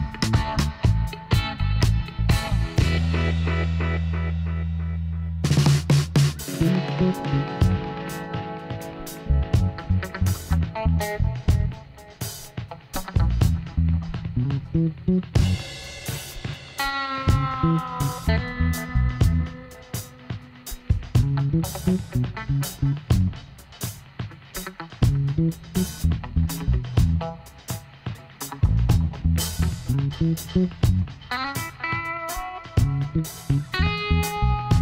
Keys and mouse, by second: 3.3 e, 6.5-10.6 middle drag, 12.7 shift+d, 17.3-19.1 middle drag, 18.1 e, 20.1 click, 21.3-24.1 drag, 24.5-25.8 middle drag, 25.1 z, 26.7 ctrl+r, 29.0 s, 33.3-34.8 drag.